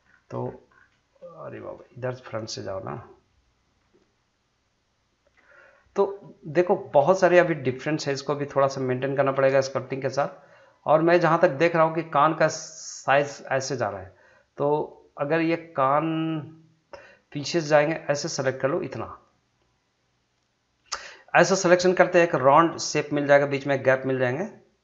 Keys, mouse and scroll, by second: 0.0 scroll down 1, 1.2 shift+middle click, 1.8 middle click, 2.9-5.7 middle drag, 5.7-6.2 scroll up 2, 6.6-8.7 shift+middle drag, 9.9 shift+Num_Lock, 9.9-12.0 shift+middle drag, 13.8-17.9 middle drag, 17.9 shift+click, 18.6-20.9 middle drag, 20.9 scroll down 1, 21.1 middle click, 21.5 scroll up 1, 21.9 shift+middle click, 22.2-24.8 middle drag.